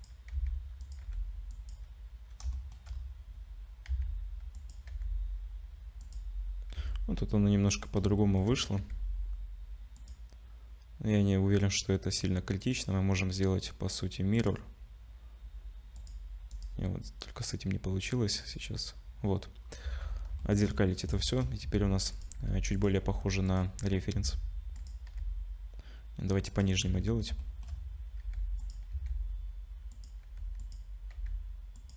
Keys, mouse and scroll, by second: 0.3 s, 1.0 g, 2.5 shift+middle click, 2.9 scroll up 3, 3.9 s, 4.9 r, 6.7 s, 8.2 shift+middle click, 8.8 g, 12.7 right click, 16.0 click, 16.5 right click, 19.6-20.0 scroll up 3, 19.8 z, 20.4 shift+middle click, 20.7 scroll up 2, 21.1 shift+click, 21.6 s, 22.4 g, 23.0 r, 23.7 s, 25.0 g, 26.8 z, 27.4 shift+middle click, 28.2 g, 28.9 s, 30.2 g, 31.1 r.